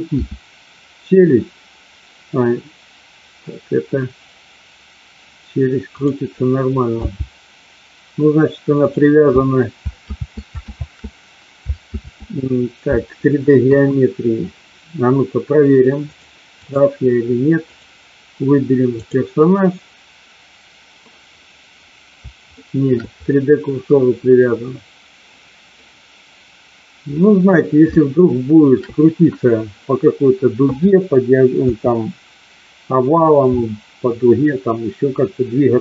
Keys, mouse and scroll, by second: 0.1 r, 6.9 g, 10.0 ctrl+z, 10.6 ctrl+z, 11.8 ctrl+z, 13.5 KP_1, 16.0 click, 17.6 click, 18.9-21.1 drag, 22.5 shift+middle click, 25.8-27.5 middle drag, 27.8 shift+middle click, 31.5 KP_3.